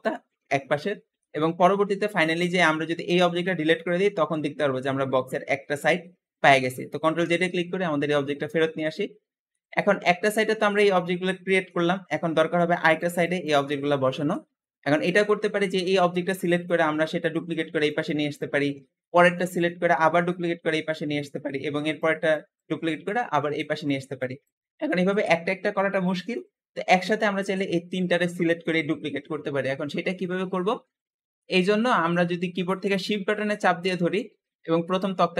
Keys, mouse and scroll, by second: 1.4-1.8 scroll up 1, 1.8 click, 2.9 x, 3.6-6.6 middle drag, 7.1 ctrl+z, 8.1 middle click, 8.6-9.4 scroll up 2, 9.4 middle click, 10.1 click, 10.9-14.2 middle drag, 14.5-15.0 middle drag, 15.0-15.9 scroll up 2, 15.9-19.1 middle drag, 19.5-25.2 middle drag, 26.2-29.3 middle drag, 31.2-34.2 middle drag.